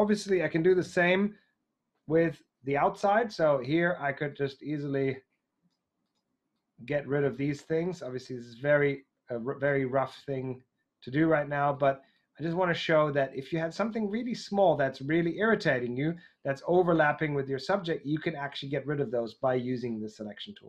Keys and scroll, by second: 0.7 shift+super+i.